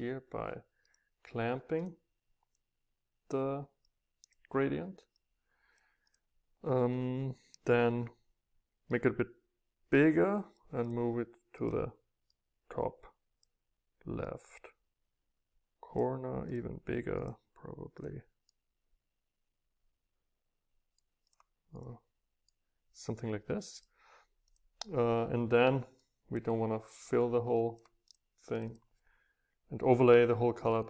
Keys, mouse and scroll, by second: 0.9 middle click, 1.7-2.3 scroll up 1, 3.9-8.1 drag, 9.0 middle click, 9.3 right click, 9.5-10.5 scroll up 2, 10.5-11.6 scroll up 1, 12.3-12.7 scroll down 2, 14.7-15.0 scroll down 2, 16.5-18.0 drag, 21.1-21.7 drag, 24.5-27.1 drag, 27.1 middle click, 27.2 click, 27.3 middle click, 27.4 click, 27.4 middle click, 27.6-28.7 drag, 28.7-30.7 middle drag.